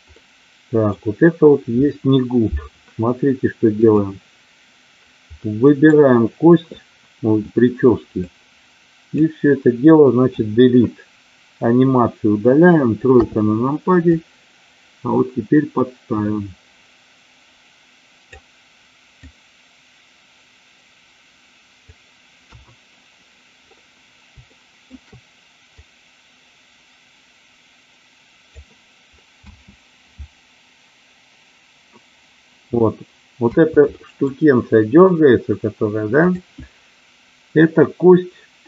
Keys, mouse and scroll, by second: 0.1-0.6 scroll up 1, 0.6 middle drag, 5.4 middle click, 8.2-9.3 drag, 10.4 Delete, 13.1 KP_3, 14.1-18.3 drag, 19.1-21.9 drag, 22.3 KP_1, 24.4 shift+middle drag, 25.6-28.6 drag, 29.2 space, 33.3 space, 34.0 middle click.